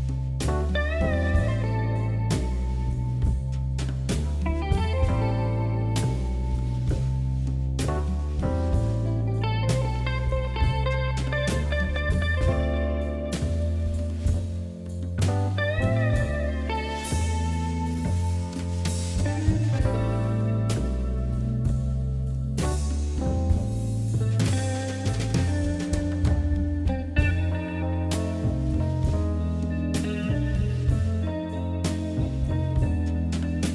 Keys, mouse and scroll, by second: 0.4 shift+click, 0.9 r, 2.2 e, 3.4 s, 5.1 r, 6.1 g, 7.7-8.1 scroll down 3, 8.1-8.7 scroll up 1, 8.7-9.1 scroll down 1, 9.1-10.2 shift+middle drag, 10.2 ctrl+r, 11.1 scroll up 2, 11.3 shift+middle click, 12.0 scroll up 1, 12.2 shift+middle click, 12.8 g, 15.4-16.7 shift+middle drag, 16.7-17.2 scroll down 1, 17.2 ctrl+z, 17.5 ctrl+z, 17.8-18.5 scroll down 3, 18.5 shift+z, 18.6-18.9 scroll down 2, 18.9 middle click, 19.3 scroll up 3, 19.5-20.7 shift+middle drag, 20.7 a, 21.4 e, 22.6 KP_7, 23.7 middle click, 24.6 s, 25.7 KP_3, 26.5 g, 28.2-29.4 middle drag, 29.4 KP_3, 30.3 click, 30.7 click, 30.9-32.4 drag, 32.7 click, 33.1 click, 33.5-33.7 middle drag.